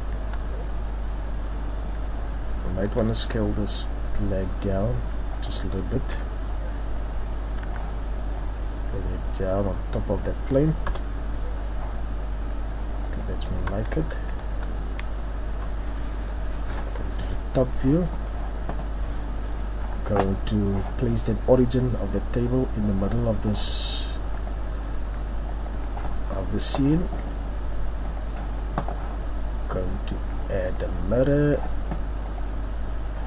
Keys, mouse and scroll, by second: 0.2 Tab, 0.5-1.2 scroll down 5, 1.1 scroll up 2, 2.2-2.7 scroll up 3, 2.8 s, 6.1 KP_3, 7.6 z, 8.4 click, 10.8 KP_0, 13.0 click, 13.5 Tab, 13.9 z, 14.5 Tab, 15.2-15.6 scroll down 3, 15.5 scroll up 4, 16.7 KP_7, 28.0 click.